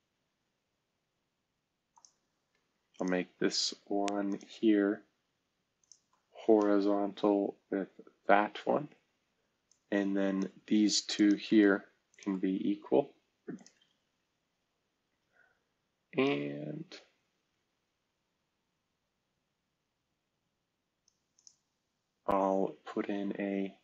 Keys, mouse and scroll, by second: 1.0 Escape, 1.9 click, 2.9 ctrl+click, 7.4 h, 12.6 typing, 13.5 click, 16.2-21.0 drag, 21.3 click.